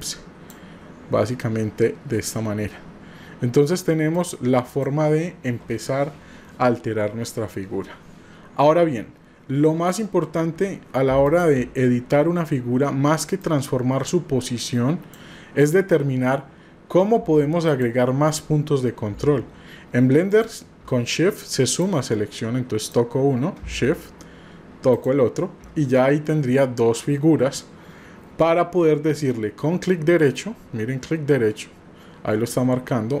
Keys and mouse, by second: 4.2 click, 11.2 shift+click, 13.4-15.1 drag, 17.6 click, 20.3 shift+click, 21.7 click, 22.8 click, 24.9 shift+click, 30.2-33.2 right drag.